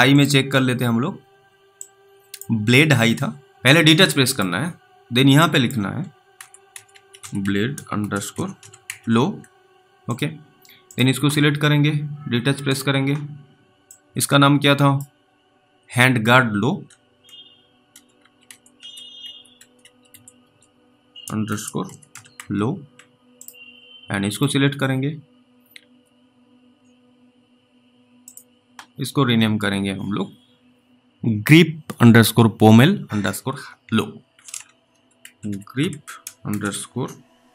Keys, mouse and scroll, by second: 2.0 click, 4.2 b, 4.3 click, 5.7 click, 6.1-9.3 typing, 10.1 click, 14.2 click, 17.9-22.8 typing, 23.4 click, 28.2 click, 34.9 g.